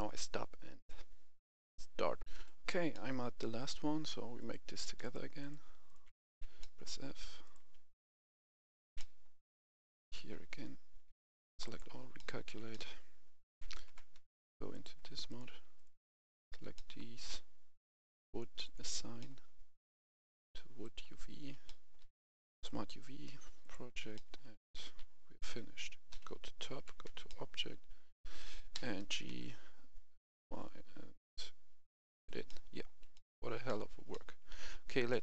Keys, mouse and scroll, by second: 2.3 F10, 2.8 middle click, 4.3 right click, 5.0 shift+right click, 5.4 shift+right click, 5.8 shift+right click, 6.2 shift+f, 6.5 middle click, 7.4 right click, 7.9 shift+right click, 8.4 shift+right click, 8.9 middle click, 9.8 shift+right click, 10.2 shift+f, 10.9 a, 11.1 a, 11.6 click, 12.1 middle click, 12.4 Tab, 12.6 middle click, 13.4 Tab, 14.6 click, 15.2 right click, 15.7 shift+right click, 16.1 shift+right click, 16.7 middle click, 17.9 click, 19.1 middle click, 19.9 click, 21.6 middle click, 22.5 click, 24.0 middle click, 26.0 KP_7, 26.7 Tab, 27.2 shift+middle click, 28.7 g, 29.2 y, 32.0 click, 32.4 middle click, 33.1 shift+middle click, 35.0 Tab.